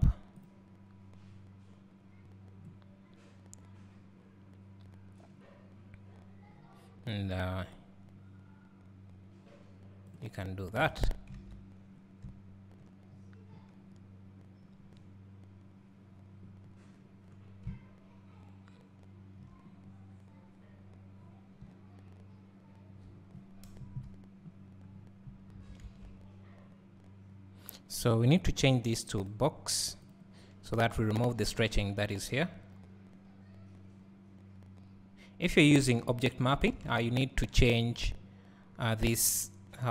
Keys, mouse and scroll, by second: 7.8-13.3 drag, 10.4 scroll down 1, 11.4 alt+a, 13.3-14.3 scroll up 1, 17.0-17.7 scroll down 1, 23.7 click, 23.7 KP_0, 23.9 click, 24.9 scroll up 1, 25.5 scroll down 1, 30.5 click.